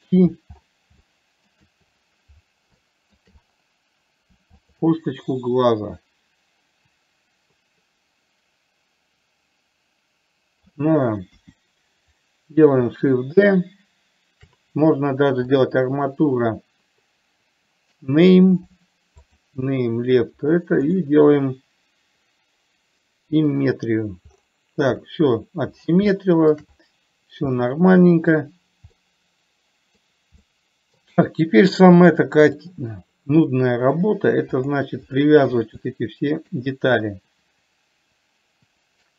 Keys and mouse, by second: 1.3 shift+middle click, 3.2 shift+middle click, 5.6-11.1 middle drag, 11.6 KP_1, 15.8-19.8 drag, 26.6 shift+middle click, 28.0 middle click, 29.3-30.3 middle drag, 30.8 middle click, 32.5 click, 33.8 middle click, 36.2-36.7 shift+middle drag.